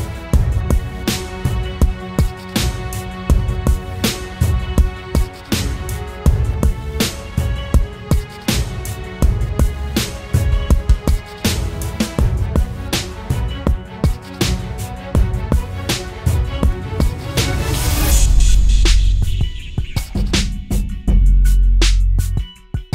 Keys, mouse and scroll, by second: 7.5 double click, 9.2-10.0 typing, 12.4 typing, 13.2 double click, 16.0-16.4 typing, 16.9 double click.